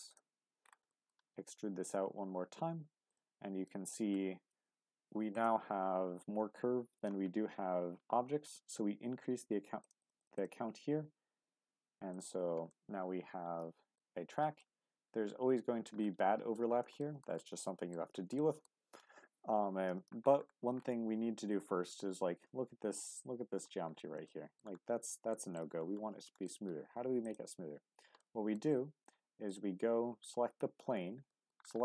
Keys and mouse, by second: 0.9 shift+middle click, 1.2 e, 3.1 click, 3.6 middle click, 4.5 Tab, 5.3 click, 9.8 click, 10.3 click, 12.8-14.0 middle drag, 14.6-15.9 middle drag, 16.2 middle click, 16.4 click, 16.5 middle click, 17.0 shift+middle click, 17.6 middle click, 18.4 shift+middle drag, 24.3-24.6 shift+middle drag, 25.3 shift+middle click, 26.2 shift+middle drag, 28.3 middle click, 30.6 Tab, 31.3 shift+middle click.